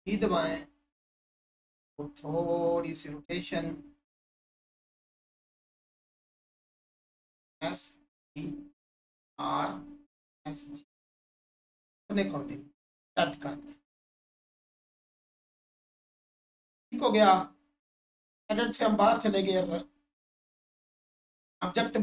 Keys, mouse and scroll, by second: 4.7 right click, 5.7 click, 11.4 1, 13.1 click, 18.3 Tab, 19.1 right click, 20.4 Tab, 21.0 click.